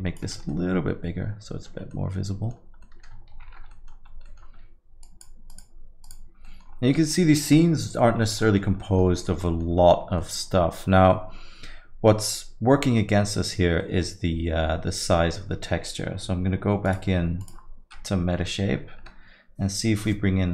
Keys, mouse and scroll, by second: 0.5 ctrl+middle click, 1.9 middle click, 2.8 middle click, 2.8 ctrl+middle click, 3.4 shift+F3, 3.7 middle click, 4.1 scroll up 3, 4.3 middle click, 5.1 click, 5.5 click, 6.5 middle click, 6.7-7.4 scroll down 7, 7.0 middle click, 7.5 middle click, 8.2 scroll up 2, 8.4 middle click, 8.8 middle click, 9.2 scroll down 1, 9.4 middle click, 10.2 middle click, 13.8 middle click.